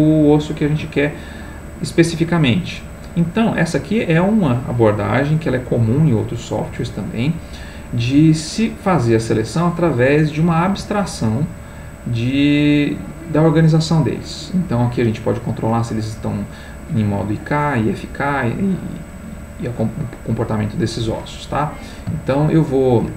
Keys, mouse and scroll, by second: 1.8-4.0 drag, 21.3 click, 22.4 ctrl+click.